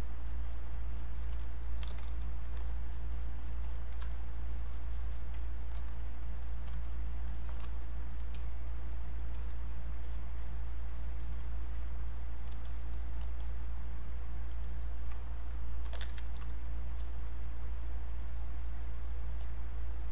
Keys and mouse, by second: 1.9 ctrl+d, 2.6 alt+click, 4.1-6.0 shift+drag, 7.8 click, 8.4 space, 9.1 click, 9.2 space, 9.5 click, 10.0 alt+click, 11.6 click, 12.7 shift+click, 13.4 click, 15.6-16.5 typing, 16.8 click.